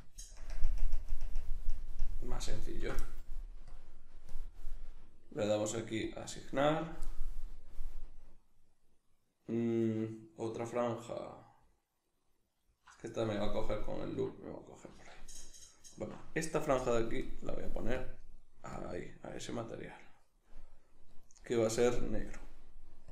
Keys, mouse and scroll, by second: 0.4 ctrl+KP_Add, 3.7 click, 12.0 alt+right click, 13.6 alt+right click, 15.7 alt+shift+right click, 17.2 click.